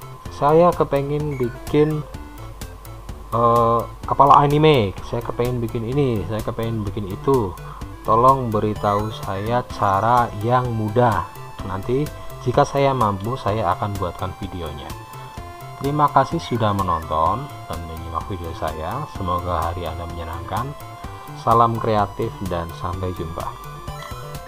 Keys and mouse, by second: 15.6-21.7 middle drag.